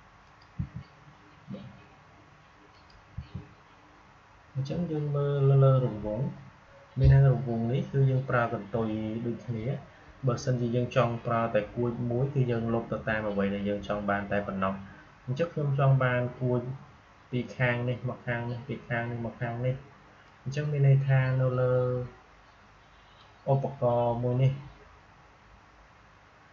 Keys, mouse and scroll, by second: 0.1 click, 0.5 Delete, 2.6 click, 3.0 Delete, 20.2-25.6 drag.